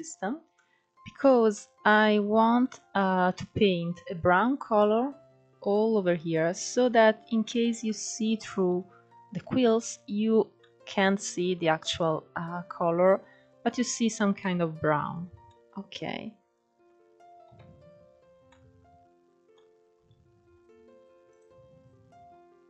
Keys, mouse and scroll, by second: 0.4-1.0 middle drag, 1.0-2.6 scroll down 2, 2.6-3.5 scroll up 5, 3.9-8.9 middle drag, 8.9 scroll up 1, 10.9 scroll down 4, 11.5-13.5 middle drag, 13.5 KP_1, 14.6-16.6 middle drag, 16.6-17.5 scroll down 2, 17.5 click, 19.2-21.2 scroll down 2, 21.3 click, 22.2 scroll up 2.